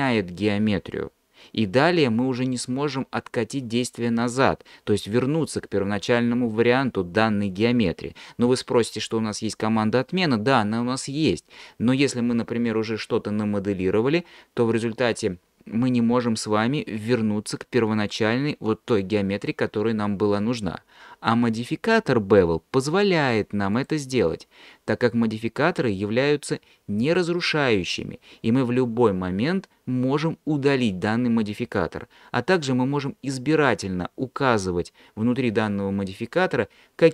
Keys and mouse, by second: 23.9-37.1 drag.